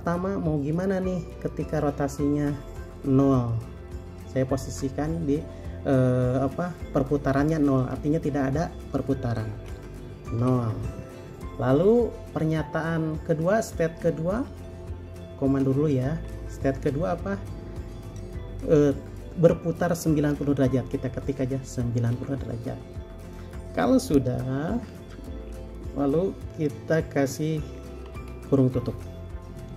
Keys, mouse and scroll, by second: 10.6 typing, 16.5 typing, 21.4-22.2 typing, 28.3 typing.